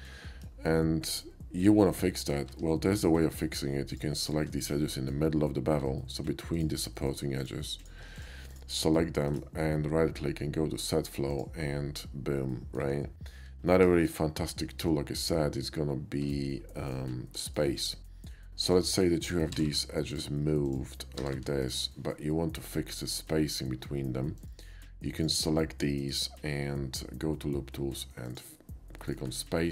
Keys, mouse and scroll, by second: 0.4 KP_5, 1.0 middle click, 2.1 middle click, 2.5 Tab, 2.9 click, 3.5 shift+middle click, 3.9 shift+click, 4.2 shift+click, 4.6 shift+middle click, 6.0 shift+middle click, 6.5 shift+click, 7.0 shift+middle click, 7.4 click, 7.8 click, 8.2 shift+click, 8.5 shift+click, 8.8 shift+middle click, 9.3 shift+right click, 11.3 shift+click, 12.5 middle click, 14.0 shift+middle click, 14.6 shift+middle click, 14.7 shift+middle click, 16.2 Tab, 16.7 middle click, 17.6 middle click, 18.7 click, 19.5 g, 19.8 g, 20.7 click, 21.6 click, 21.9 g, 22.2 middle click, 24.4 click, 25.2 ctrl+click, 26.0 right click, 28.3 click.